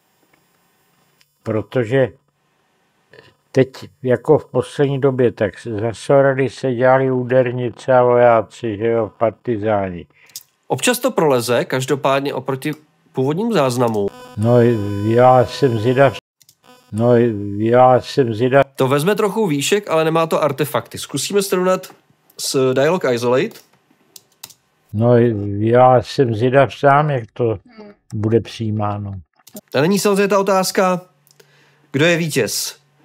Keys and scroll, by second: 24.0 space.